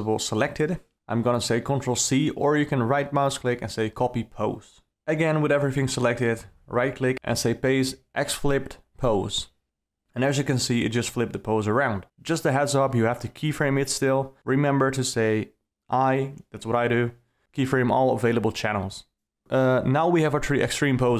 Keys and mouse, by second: 3.0 ctrl+c, 4.8-8.0 right drag, 9.4-11.2 right drag, 13.8 KP_3, 14.0 KP_9, 17.4 i, 21.1 Down.